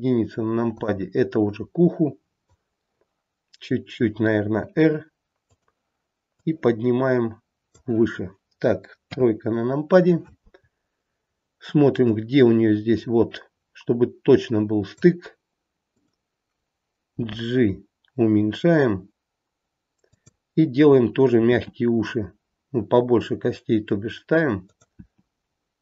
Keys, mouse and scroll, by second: 0.8 click, 4.4 r, 6.3 click, 9.0 KP_3, 10.7-11.5 scroll up 1, 12.0 click, 15.8 click, 17.1 g, 21.5 e, 24.9 e.